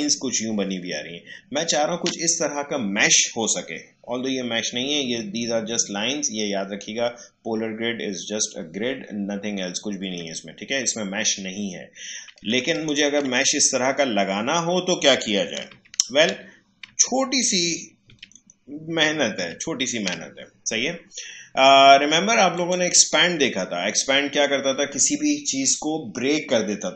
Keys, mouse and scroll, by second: 10.0 Delete, 12.7 ctrl+click, 15.7 ctrl+z, 22.5 click.